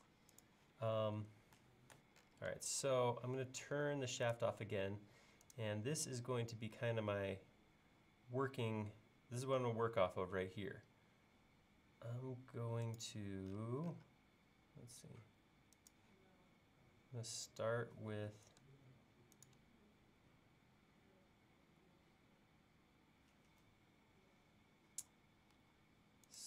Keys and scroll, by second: 8.7 l, 25.6 l.